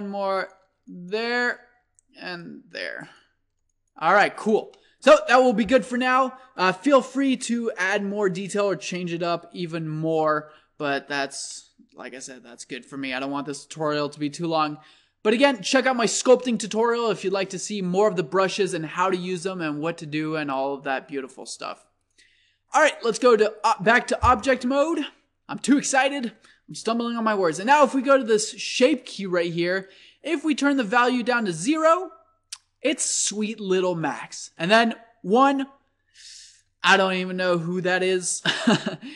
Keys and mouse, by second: 5.4-12.2 middle drag, 12.2 click, 16.8-18.7 drag, 22.8-23.9 drag, 24.9-30.8 middle drag, 30.8-32.7 drag, 37.2-39.1 middle drag.